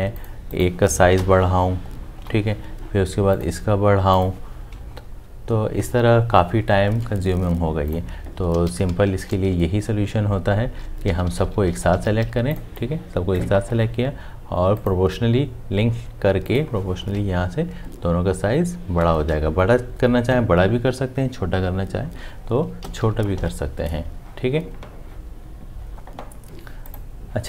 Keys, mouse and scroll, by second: 1.1 Up, 4.9 Up, 8.5 ctrl+z, 17.1 Up, 19.8 Down.